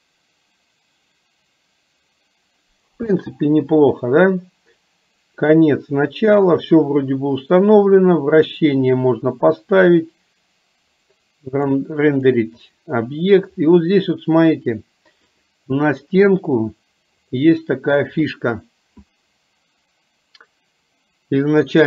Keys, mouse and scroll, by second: 3.3 space, 11.8 click, 15.5 click.